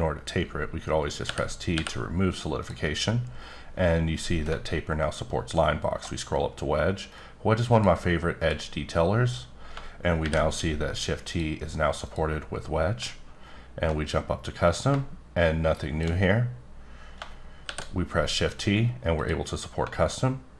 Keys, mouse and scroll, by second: 1.2 t, 2.6 click, 3.7-4.2 scroll up 1, 4.5-5.5 alt+scroll up 1, 5.6-7.1 alt+scroll up 2, 7.1 click, 8.4 click, 10.2 shift+t, 11.3 click, 12.0 click, 13.3-13.9 alt+scroll up 1, 13.9 scroll up 1, 14.6-16.2 drag, 17.6 shift+t, 18.4 click, 19.2 click, 20.1-20.5 alt+scroll up 1.